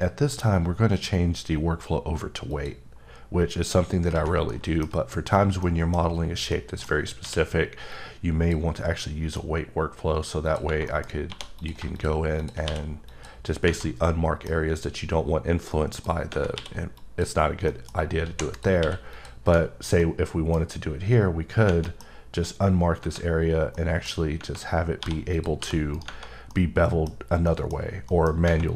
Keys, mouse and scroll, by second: 2.4 click, 4.5 middle click, 5.1-5.6 scroll up 3, 5.6 middle click, 7.2 q, 7.9 click, 10.8 middle click, 11.3 2, 11.6 click, 12.6 q, 13.1 click, 14.0 middle click, 16.9 click, 17.7 middle click, 18.3 3, 18.5 click, 18.8 q, 19.1 click, 20.0 middle click, 20.2 scroll down 1, 20.6 scroll up 3, 21.8 middle click, 22.0 scroll up 3, 23.4 scroll down 1, 23.7 middle click, 24.1 scroll down 1, 25.0 1, 25.3 click, 25.6 g, 25.9 right click, 26.5 middle click, 27.0 scroll down 1, 27.4 middle click, 27.7 scroll down 1, 28.1 middle click, 28.3 scroll up 1.